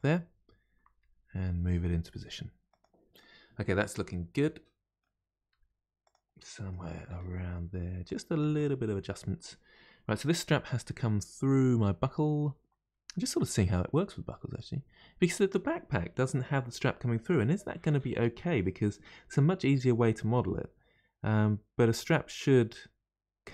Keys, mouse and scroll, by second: 3.2-5.5 middle drag, 5.5 g, 6.4 middle click, 7.0 r, 8.4-11.4 middle drag.